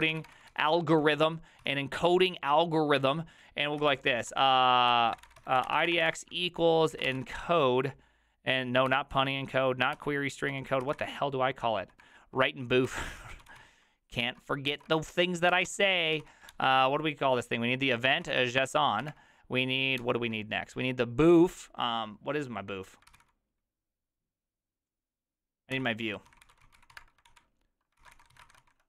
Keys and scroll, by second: 0.0-2.1 typing, 3.8 ctrl+c, 3.9 ctrl+u, 4.3 ctrl+d, 5.0-7.6 typing, 8.9 ctrl+n, 9.7-10.4 typing, 10.8 ctrl+c, 11.0 ctrl+^, 12.0 ctrl+^, 12.6-16.7 typing, 14.2 ctrl+n, 18.0-19.1 typing, 20.0 ctrl+h, 23.2 ctrl+c, 23.2 ctrl+u, 25.7 ctrl+d, 26.0-28.8 typing.